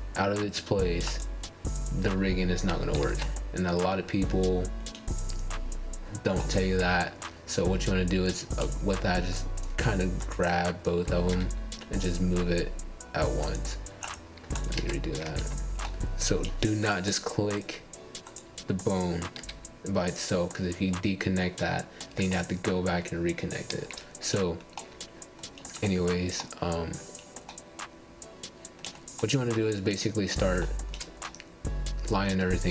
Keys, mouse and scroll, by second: 2.5 scroll up 1, 2.6 middle click, 3.2 ctrl+z, 4.6-5.0 scroll up 6, 5.0-6.1 shift+middle drag, 6.1 g, 8.3 ctrl+z, 9.2 click, 10.9 g, 13.4 ctrl+z, 13.9 middle click, 14.2-14.8 scroll down 11, 14.9 middle click, 15.3-15.6 scroll down 4, 15.7 shift+middle click, 16.1-16.4 scroll down 3, 16.4 middle click, 17.1-17.5 scroll down 2, 17.5-18.8 shift+middle drag, 18.9 click, 20.0 g, 21.3 click, 21.5 g, 22.6 shift+middle click, 22.8 scroll down 1, 23.1-23.4 scroll up 5, 23.4-26.2 shift+middle drag, 26.2 KP_9, 27.1-28.7 scroll down 6, 28.7-29.5 scroll up 1, 29.5 ctrl+shift+scroll up 1, 29.6 shift+middle click, 30.4 click, 31.4 g, 32.5 scroll up 1, 32.6-32.7 middle drag.